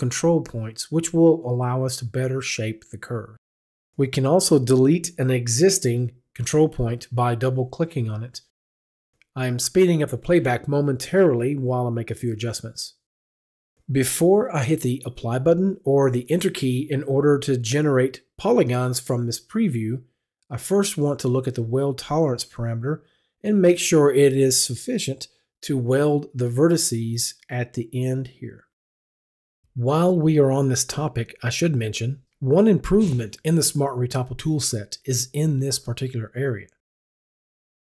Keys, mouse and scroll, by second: 4.5 click, 5.0 click, 6.1 click, 6.6 click, 7.2 click, 8.2 click, 8.8 click, 9.4 click, 10.3 click, 11.2 click, 11.7 click, 12.6 click, 13.0 click, 16.9 click, 20.8 click.